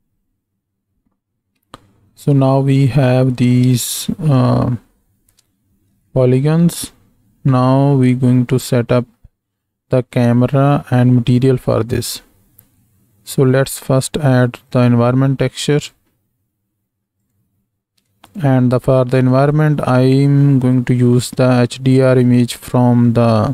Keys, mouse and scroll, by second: 3.6 space, 5.5 space, 6.2 shift+middle click, 14.6 click, 15.8 click, 17.2-18.4 drag.